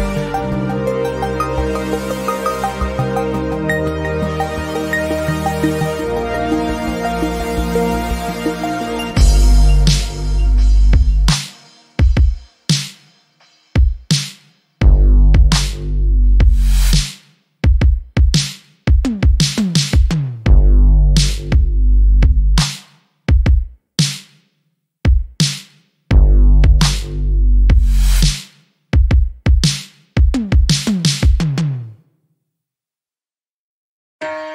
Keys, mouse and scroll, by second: 0.9 alt+middle click, 1.3 click, 2.3 alt+middle click, 2.8 scroll up 1, 3.7 alt+middle click, 8.5 right click, 9.4 click, 9.8 alt+middle click, 11.0 click, 14.1 Escape, 15.1 alt+middle click, 15.5 scroll up 1, 16.2 alt+middle click, 16.6-16.9 scroll down 1, 16.9 middle click, 18.7 scroll up 1, 20.1 click, 20.5-21.1 scroll up 1, 21.1 alt+middle click, 21.3-21.7 alt+scroll up 2, 22.0 click, 23.4-24.0 scroll down 1, 24.0 alt+middle click, 24.5-25.0 scroll up 1, 25.8 double click, 26.1-26.7 scroll up 1, 26.7 click, 28.4 scroll down 1, 28.6 alt+middle click.